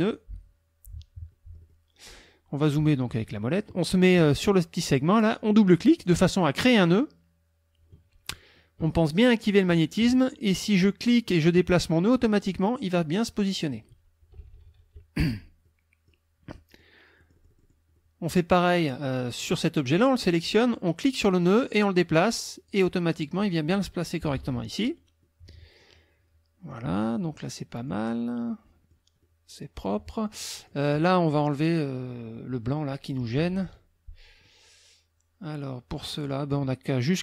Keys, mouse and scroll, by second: 0.0 click, 1.3 click, 2.8 click, 5.8 click, 9.4 click, 11.1-12.7 drag, 14.2 KP_Subtract, 15.6 middle click, 16.5 middle click, 17.2-18.6 middle drag, 19.4 click, 21.4-22.9 drag, 23.3 click, 24.2 KP_Subtract, 25.2 click, 26.7 click, 27.4 middle click, 27.7 click, 28.5 click, 29.2 click, 30.2 click, 31.5 click, 32.3 click, 33.4 KP_Subtract, 34.5-36.4 drag.